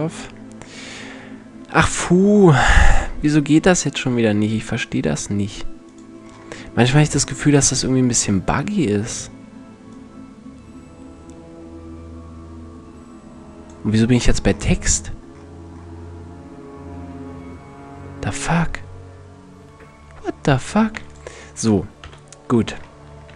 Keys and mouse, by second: 4.5-7.3 drag, 7.3-8.7 middle drag, 9.5-11.3 drag, 15.1-18.4 middle drag, 20.5 x, 21.7 KP_1, 23.0 shift+c.